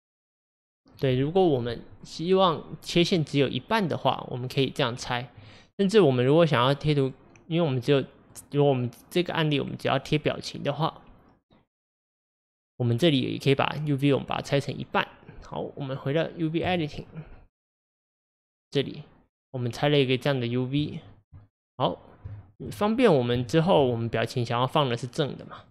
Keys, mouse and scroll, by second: 16.7 click.